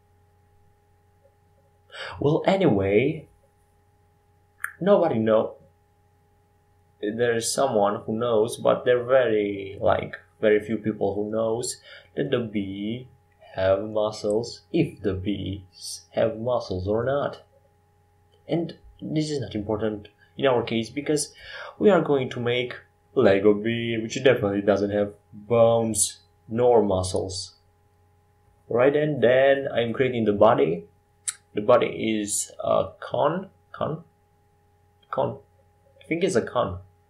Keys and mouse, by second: 3.8-6.1 drag, 30.5 ctrl+shift+z, 33.5 shift+a.